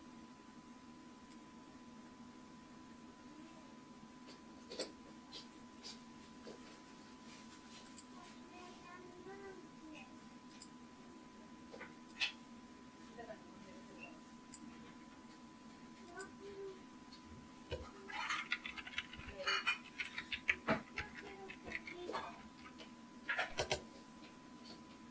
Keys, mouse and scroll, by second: 5.0-6.3 drag, 8.0 click, 10.6-18.8 drag, 18.5-22.5 typing.